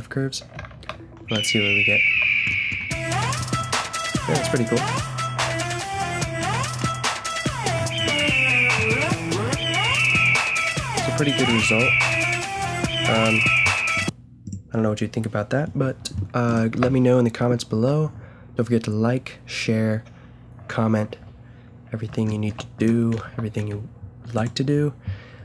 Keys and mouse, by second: 0.7 alt+a, 2.1 a, 5.4 KP_0, 9.6-10.3 middle drag, 11.5-13.0 drag, 11.8 a, 13.0-13.8 middle drag, 13.9-16.4 drag, 16.5-19.9 drag, 17.7 a, 23.2 a, 24.3-24.9 middle drag, 24.9-25.4 drag.